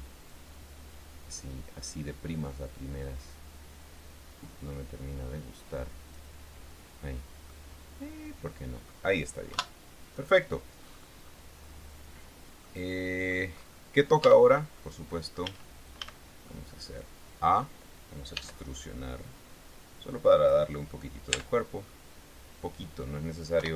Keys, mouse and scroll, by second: 0.7-6.7 drag, 7.9-9.4 middle drag, 9.9 KP_1, 10.6-11.1 scroll down 2, 11.1-11.5 scroll up 2, 11.6-12.3 scroll down 4, 12.6 scroll down 2, 13.0 middle click, 14.1 scroll up 2, 14.6 Tab, 15.1 click, 15.7 a, 16.8-18.1 drag, 18.7 e, 20.7 click, 21.7 Tab, 22.0 scroll down 1, 22.3-23.5 middle drag.